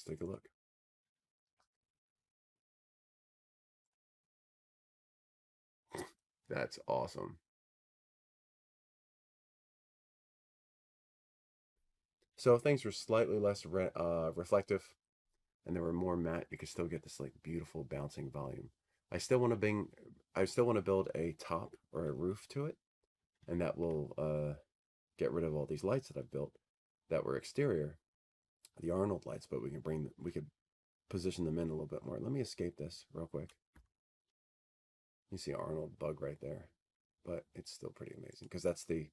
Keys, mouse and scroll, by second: 1.2 middle click, 2.9 click, 2.9 middle click, 6.0 click, 9.6 click.